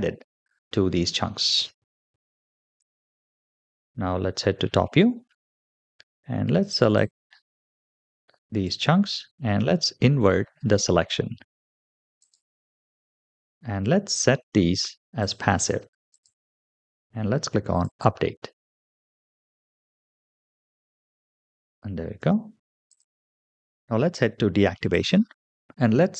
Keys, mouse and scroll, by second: 0.8 space, 2.0 space, 2.6 click, 4.3 KP_7, 5.4-5.7 shift+middle drag, 6.8-8.6 drag, 10.3-11.5 scroll up 3, 12.0 click, 12.2 typing, 13.3-13.6 scroll down 3, 15.1 click, 16.0 click, 16.8-17.5 scroll down 2, 17.5 click, 19.8-20.6 middle drag, 20.8 space, 22.0 space, 22.7 click, 23.5 shift+middle drag, 23.8 click, 24.8 click.